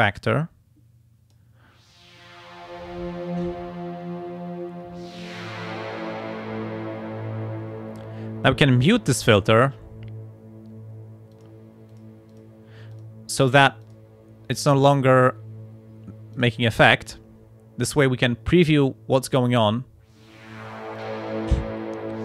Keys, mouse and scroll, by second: 0.3-1.5 drag, 9.5 click, 11.3 click, 11.9 click, 12.3 click, 12.9 click, 13.8 click, 16.3 click, 21.0 click.